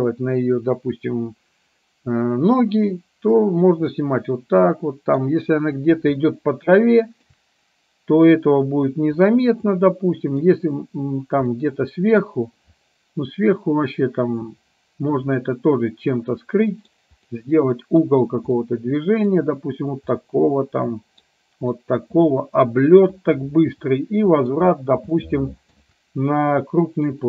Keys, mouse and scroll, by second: 4.2-5.3 middle drag, 6.4-7.5 shift+middle drag, 9.4-10.5 middle drag, 11.7 middle click, 15.5-17.0 middle drag, 17.4-18.2 middle drag, 18.8 middle click, 20.3-21.4 middle drag, 21.8-24.7 middle drag, 25.3-25.9 shift+middle drag.